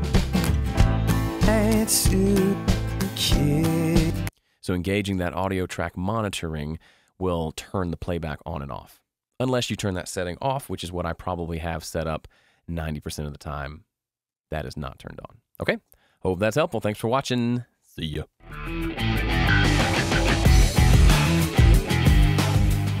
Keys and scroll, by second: 4.2 space, 10.3 super+,.